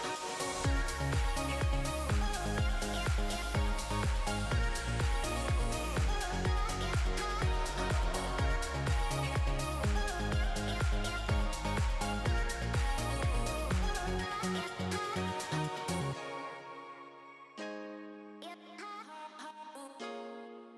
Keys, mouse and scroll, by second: 2.8 alt+a, 3.1 middle click, 3.6 alt+z, 3.8 middle click, 4.5 scroll down 2, 4.6 shift+middle click, 4.9 scroll up 2, 5.1 shift+middle click, 5.5-6.3 scroll down 2, 5.8 click, 7.6 middle click, 8.0 scroll up 3, 8.2 shift+middle click, 9.3 s, 10.5 alt+a, 10.7-11.7 scroll down 4, 11.0 middle click, 12.0 click, 12.1-12.8 scroll up 5, 12.3 shift+middle click, 12.8 middle click, 13.3 Tab, 13.5 middle click, 14.3 click, 14.9 shift+click, 15.5 click, 18.4 alt+a, 18.6 scroll down 3, 18.8 middle click, 19.1 Tab, 19.5 click, 19.8 middle click, 20.7 scroll up 2.